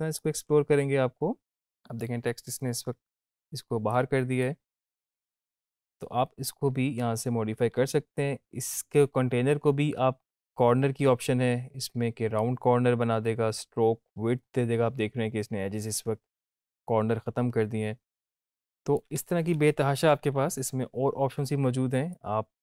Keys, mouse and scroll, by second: 0.4 scroll down 1, 3.9-4.5 click, 5.0 ctrl+z, 9.5 scroll down 1, 10.5-18.3 drag, 18.3-19.2 click, 19.1 space, 21.6 space, 22.4-22.6 drag.